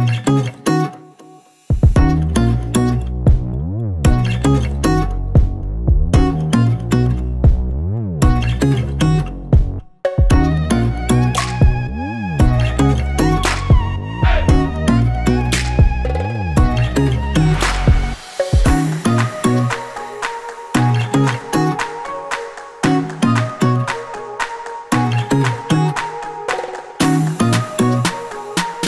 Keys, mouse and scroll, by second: 0.1 click, 0.6 click, 1.9 click, 2.6 scroll down 1, 3.4-3.9 scroll up 1, 4.1 click, 4.4 scroll down 1, 4.7 scroll up 1, 5.7 Page_Down, 6.6 scroll down 1, 6.9 scroll up 1, 7.5 ctrl+click, 8.4 click, 8.8 scroll down 1, 9.3 scroll up 1, 10.3 click, 11.4 scroll down 1, 11.6-12.0 scroll up 1, 12.9 click, 13.6 click, 14.3 click, 15.4 click, 16.7 click, 17.2 click, 18.4 click, 19.0 click, 21.4 click, 22.9 click, 23.5 click, 24.8 click, 26.8 click, 27.2 scroll down 1, 28.1-28.4 scroll up 1, 28.5 scroll down 1, 28.7 scroll up 1.